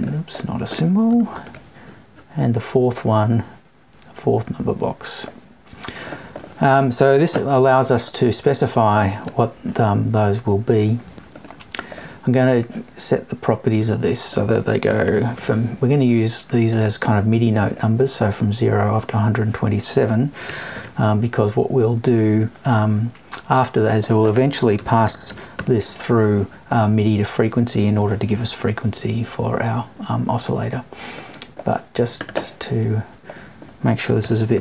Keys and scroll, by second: 1.1 BackSpace.